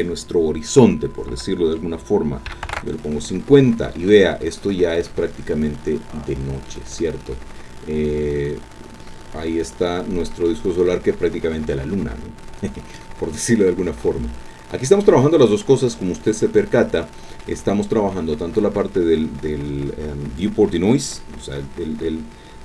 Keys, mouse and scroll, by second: 2.5 KP_5, 2.6 KP_0, 2.7 KP_Enter, 4.2-5.1 scroll down 2, 5.1-6.9 drag, 6.9 scroll down 2, 7.6-10.5 drag, 10.5-11.0 scroll up 1, 12.1-13.1 drag, 13.1-13.6 scroll up 1, 14.0 click, 15.6-17.6 drag.